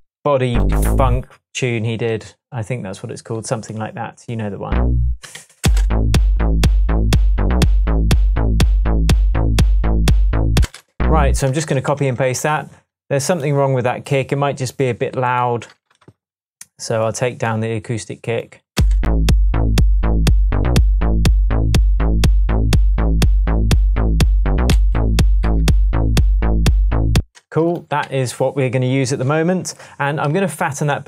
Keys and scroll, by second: 0.7 Up, 5.4 d, 5.6 space, 10.6 space, 11.5 super+space, 11.6 super+d, 12.0 shift+super+Tab, 12.8 shift+Tab, 18.8 space, 24.7 alt+m, 27.2 space, 27.9 super+space, 28.0 super+s.